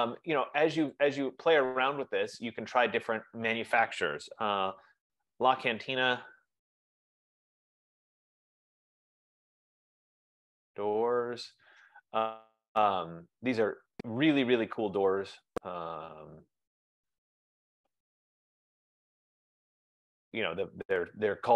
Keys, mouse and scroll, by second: 1.5 click, 3.3 click, 4.8-11.8 typing, 7.0 F15, 15.3 click, 17.8 click, 20.6 click.